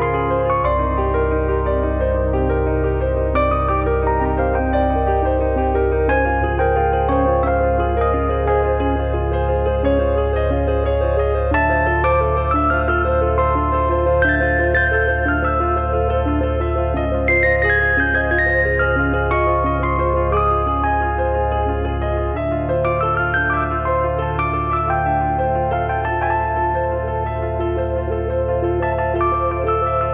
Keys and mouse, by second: 0.4 middle click, 0.8 click, 2.3 middle click, 3.5 click, 5.6 click, 6.9 middle click, 7.9 middle click, 8.6 KP_Decimal, 8.7 middle click, 9.9 shift+middle click, 14.3 click, 14.6 click, 16.1 click, 17.2 click, 17.8 middle click, 18.0 shift+middle click, 18.4 middle click, 20.4 click, 22.7 click, 23.7 middle click, 26.0 click, 28.0 click, 29.1 middle click, 29.4 shift+middle click, 29.6 middle click, 30.0 shift+middle click.